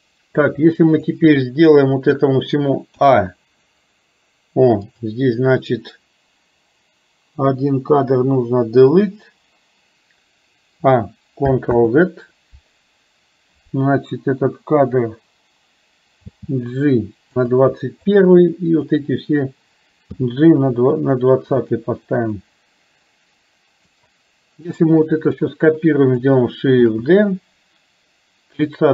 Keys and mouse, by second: 0.6 click, 3.1 a, 8.8 Delete, 11.8 ctrl+z, 16.3 g, 18.2 click, 20.2 g, 22.4-24.1 drag, 24.7 click, 27.0 shift+d.